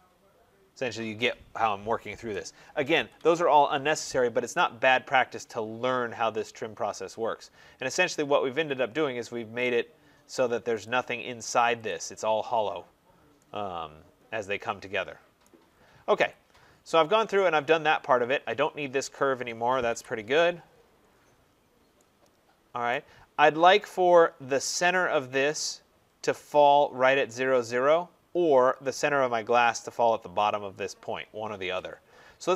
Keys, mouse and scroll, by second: 1.1 right click, 2.2 Return, 2.9 Escape, 3.1 Escape, 3.4 middle click, 3.5 middle click, 4.5 right click, 4.8 middle click, 4.9 middle click, 4.9 middle click, 5.6 scroll, 9.5 right click, 9.9 scroll, 10.7 click, 11.8 click, 12.7 scroll down 3, 13.4 scroll, 15.3 right click, 15.5 scroll, 16.2 click, 16.6 middle click, 16.7-17.2 middle click, 17.1 middle click, 18.1 middle click, 18.2 middle click, 18.2 middle click, 18.3 middle click, 19.0 click, 19.0 scroll, 19.8 Delete, 20.5-22.0 scroll, 22.8 right click, 23.2 middle click, 23.4 middle click, 24.1 middle click, 24.2 middle click.